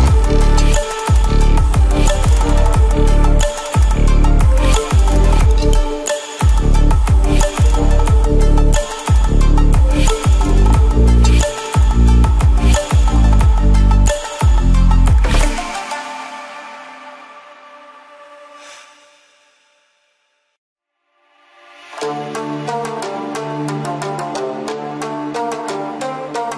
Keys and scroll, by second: 15.4 ctrl+f, 17.8 ctrl+g, 22.1 Return.